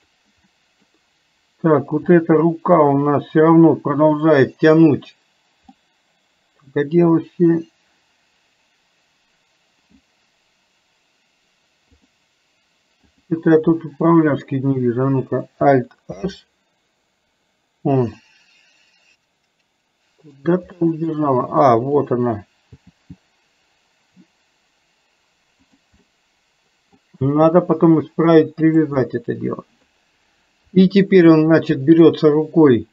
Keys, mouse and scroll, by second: 0.7 scroll up 2, 0.8 middle click, 0.9 scroll down 2, 5.9 scroll up 2, 6.0-10.1 middle drag, 12.1 click, 13.1 click, 18.2-20.4 middle drag, 20.8 middle click, 21.9 click, 26.0 middle click, 29.2 middle click.